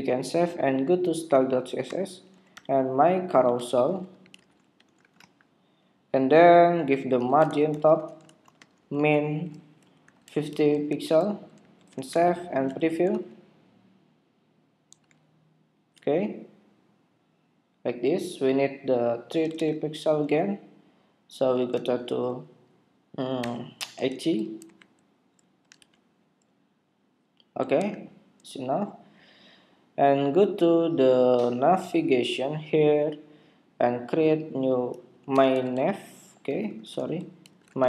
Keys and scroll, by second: 0.0 super+s, 11.8 super+Tab, 13.2 super+r, 15.0 super+r, 19.5 super+Tab, 24.6 super+Tab, 25.8 super+r, 27.7 super+Tab.